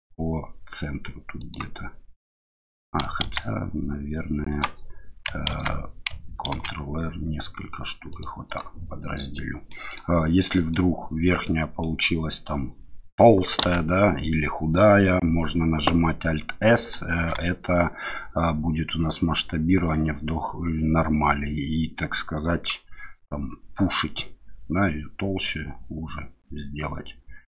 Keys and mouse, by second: 3.2 ctrl+z, 4.5 click, 5.5 ctrl+z, 6.5 ctrl+r, 8.4 click, 9.5 middle click, 10.5 middle click, 11.4 middle click, 17.1 alt+s.